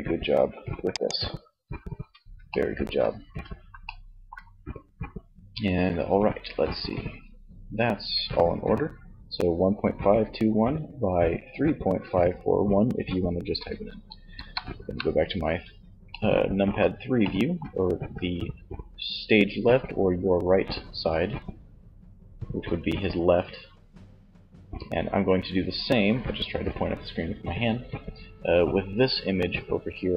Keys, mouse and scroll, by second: 1.2-5.0 middle drag, 13.3 KP_3.